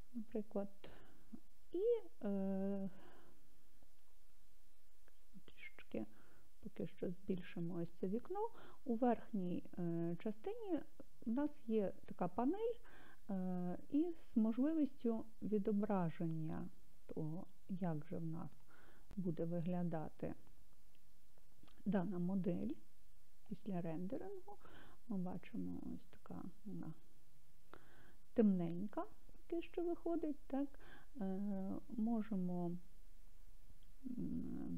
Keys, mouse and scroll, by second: 6.1-7.8 drag, 18.9 click, 26.0-29.1 scroll.